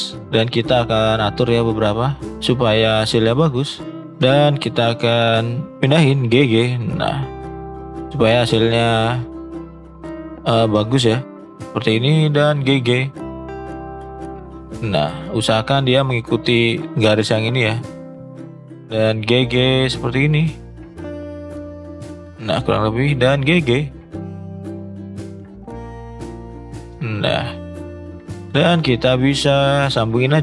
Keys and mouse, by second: 5.7 g, 9.9 g, 12.3 g, 18.7 g, 22.7 click, 23.1 g, 27.3 shift+middle click, 28.6 click, 29.9-30.4 shift+drag.